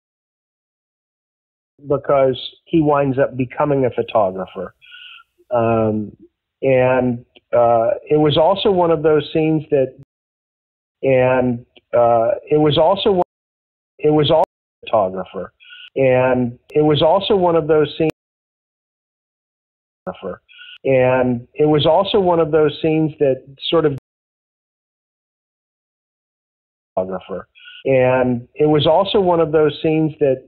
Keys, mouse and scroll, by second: 0.7 click, 1.6 click, 1.7 space, 2.3 ctrl+s, 3.6 click, 4.4 click, 6.7-10.0 drag, 9.9 space, 10.6 ctrl+shift+Delete, 10.8 space, 11.7-13.1 drag, 13.1 space, 13.7 ctrl+shift+Delete, 13.9 space, 14.3 space, 14.6 click, 14.7 space, 17.5 click, 18.0 space, 18.5-19.5 drag, 19.9 click, 20.0 space, 22.8-23.8 drag, 23.8 space, 25.0 click, 26.7 click, 26.9 space, 28.8 click, 30.0 click.